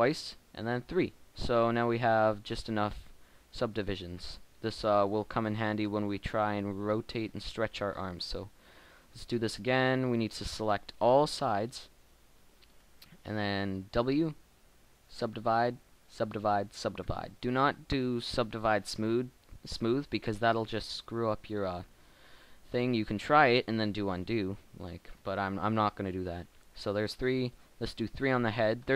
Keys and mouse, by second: 1.7 click, 2.9 Tab, 7.8 Tab, 11.6 b, 13.9 w, 15.7 w, 16.8 w, 17.8 Tab, 18.8 Tab, 19.6 Tab, 19.9 Tab, 20.7 Tab, 21.0 b, 21.8 Tab, 22.7 b, 24.6 w, 25.7 w, 26.0 w, 26.8 Tab, 27.6 Tab, 28.8 b.